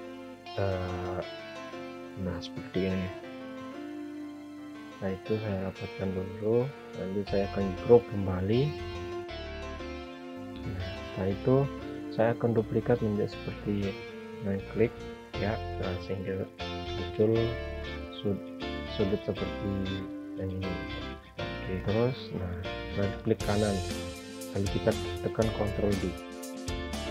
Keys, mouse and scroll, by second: 1.3 ctrl+right click, 3.0 click, 4.8 click, 14.8 click, 18.3 ctrl+z, 19.7 click, 22.5 ctrl+right click, 24.6 ctrl+d.